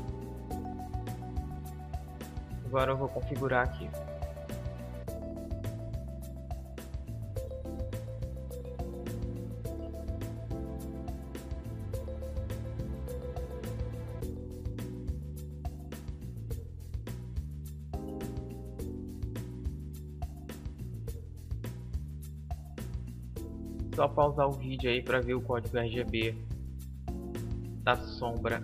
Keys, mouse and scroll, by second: 1.6-3.3 drag, 3.3-4.7 middle drag, 4.7-6.4 drag, 6.6-8.4 drag, 10.8-12.7 drag, 14.3 KP_5, 18.1-20.1 drag, 24.4 middle click, 26.2-28.6 middle drag.